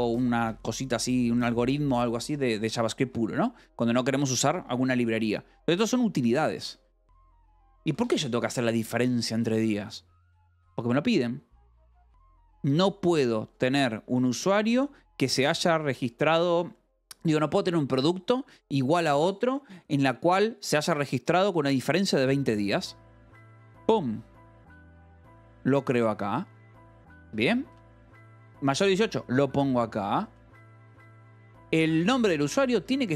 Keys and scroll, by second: 0.3 Escape, 2.9 v, 3.6 Escape, 6.0-8.5 typing, 7.5 Escape, 14.6 Escape, 20.1-21.0 typing, 24.3 Escape, 26.4 shift+v, 27.1 Escape, 27.5 k, 28.3 shift+v, 29.4 Escape, 29.7-30.7 typing, 32.1 ctrl+g, 32.7 Escape, 32.9-33.1 typing.